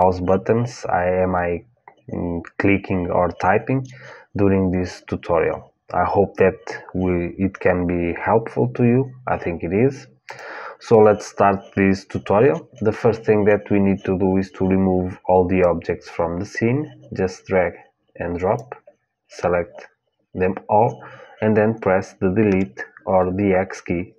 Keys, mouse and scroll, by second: 10.0-12.2 drag, 15.3-18.3 drag, 22.2 Delete.